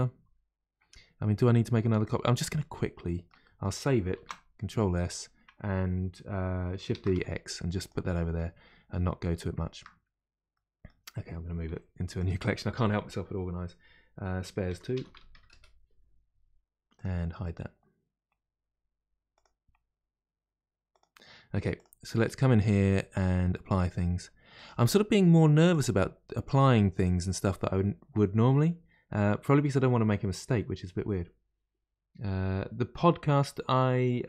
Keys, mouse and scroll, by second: 0.9-1.3 scroll down 2, 1.3 middle click, 2.0 click, 2.6-3.4 scroll down 1, 3.4-4.4 middle drag, 4.4 ctrl+s, 6.9 shift+d, 8.1 middle click, 8.5-9.2 scroll up 1, 9.2-10.0 middle drag, 10.0-10.5 scroll up 1, 10.5-11.6 middle drag, 11.6 m, 19.3 click, 19.7-20.1 scroll down 2, 20.9 click, 21.7 click, 24.5 click, 25.7 click, 26.4 click, 26.9 click.